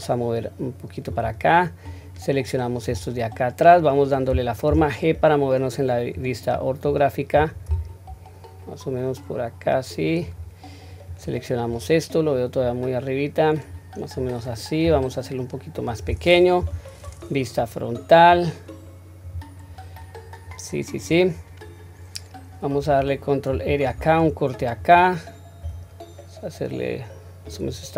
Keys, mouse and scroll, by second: 4.7 g, 6.8 click, 7.6 g, 11.1 click, 12.6-14.2 drag, 14.8 s, 16.6 KP_1, 18.3 click, 25.6 s.